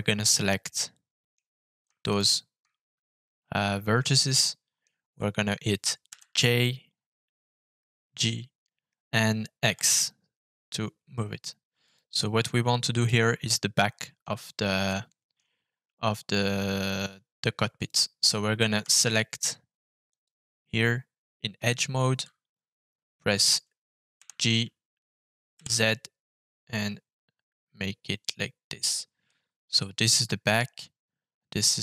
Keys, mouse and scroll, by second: 0.6 middle click, 2.0 shift+click, 4.3 middle click, 6.0 g, 9.6 x, 11.8 click, 13.0-14.2 middle drag, 14.8 middle click, 17.7 click, 18.6 2, 20.0 click, 25.5 g, 25.5 z, 28.6 click, 29.2 middle click.